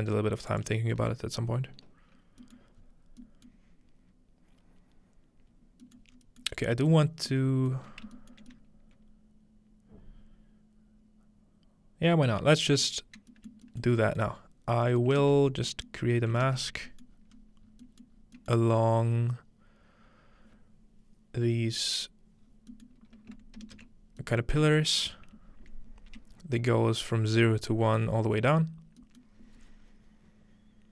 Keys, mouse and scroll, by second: 0.5 ctrl+click, 0.9-3.2 scroll down 2, 2.4-3.2 middle drag, 3.5-4.9 middle drag, 6.0 middle click, 6.1-8.0 scroll up 2, 6.5 middle click, 7.0-8.2 middle drag, 8.5 shift+middle click, 13.3 middle click, 14.3 shift+middle click, 14.6 scroll down 1, 15.1 shift+middle click, 16.0-16.7 middle drag, 16.1-17.1 scroll up 3, 17.1 scroll down 2, 17.3-17.8 scroll up 4, 18.1 scroll down 1, 18.8 scroll up 1, 20.1-22.3 scroll down 2, 22.4-23.9 scroll down 2, 22.9-24.3 middle drag, 24.4 ctrl+middle click, 24.8-26.4 shift+middle drag, 29.2-30.7 middle drag.